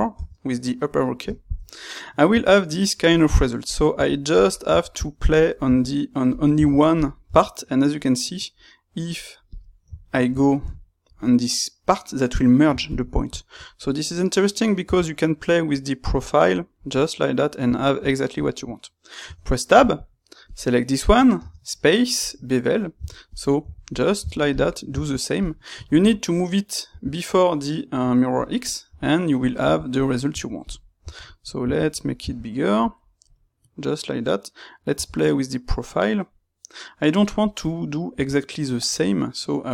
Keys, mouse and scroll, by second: 9.6 middle click, 13.6-20.4 middle drag, 20.4 click, 20.9-39.7 middle drag.